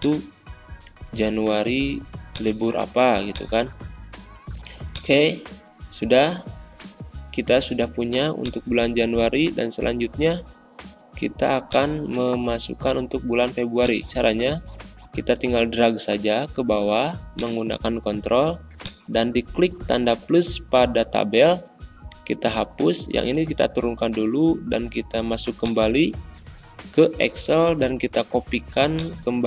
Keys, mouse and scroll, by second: 5.0 click, 15.7 ctrl+Num_Lock, 15.7-17.3 ctrl+drag, 20.0 BackSpace, 29.1 click.